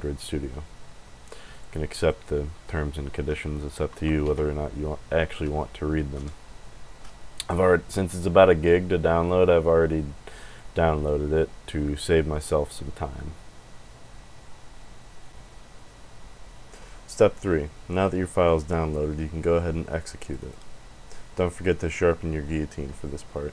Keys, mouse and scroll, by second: 1.5 click, 1.9 click, 10.4 click, 18.4 click, 20.2 click, 20.3 click.